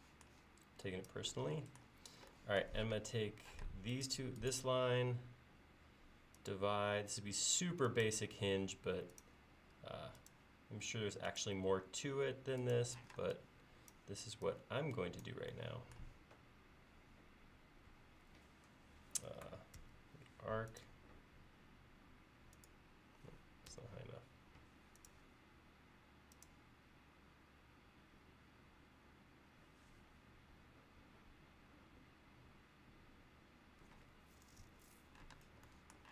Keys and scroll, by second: 3.7 space, 8.4 l, 13.1 p, 16.7 l, 19.8 a, 23.8 Escape, 35.4 space.